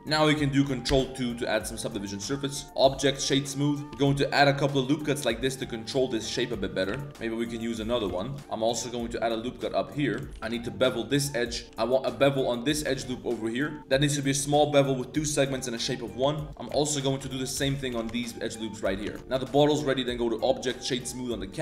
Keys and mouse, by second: 0.0 click, 0.9 ctrl+2, 1.4 middle drag, 1.9 middle click, 2.9-3.8 drag, 4.0 Tab, 4.0 ctrl+r, 4.0 KP_3, 4.0 z, 6.9 ctrl+r, 8.0 1, 8.3 alt+right click, 8.4 Tab, 8.4 ctrl+r, 8.4 a, 8.4 z, 10.0 Tab, 10.2 shift+click, 10.3 z, 10.3 2, 10.4 ctrl+b, 11.7 ctrl+b, 15.6 click, 16.3 shift+click, 16.5 alt+shift+2, 16.5 alt+shift+click, 17.1 alt+shift+click, 17.2 z, 17.5 z, 17.9 ctrl+b, 19.1 Tab, 19.2 ctrl+z, 19.2 a, 19.8 click, 20.4 click, 20.8 click.